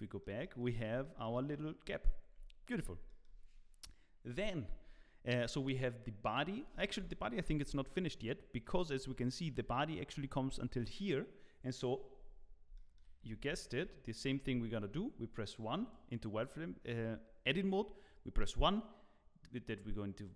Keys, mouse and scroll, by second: 0.4 middle click, 1.0 shift+middle click, 7.0 KP_1, 7.5 Tab, 7.8-8.5 scroll up 1, 8.5 z, 8.9 scroll up 2, 9.2 shift+middle click, 12.5 scroll down 2, 12.7 shift+middle click, 13.4 alt+a, 13.7 q, 14.8 1, 15.9 click, 16.7-18.9 scroll up 1.